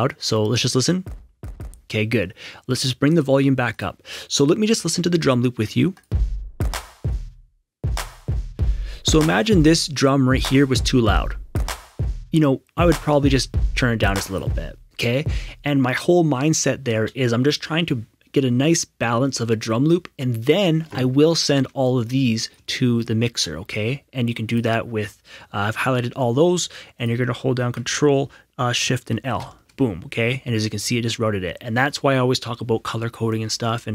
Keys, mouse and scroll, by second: 0.9 click, 0.9 q, 1.2 q, 1.4 q, 3.1 right click, 3.7 click, 5.9 click, 13.4 click, 15.1 space, 21.8 shift+click, 27.0 click, 28.8 ctrl+s, 29.3 ctrl+shift+l.